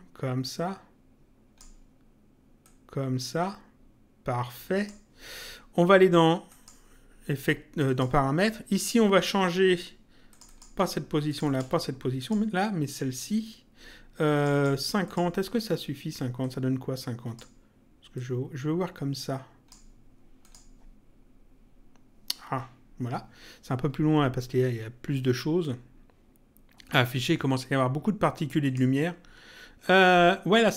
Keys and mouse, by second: 2.6 click, 6.5 click, 7.8 click, 10.3 click, 14.3 click, 16.4 click, 18.1 click, 20.4 click, 25.6 click, 28.6 click.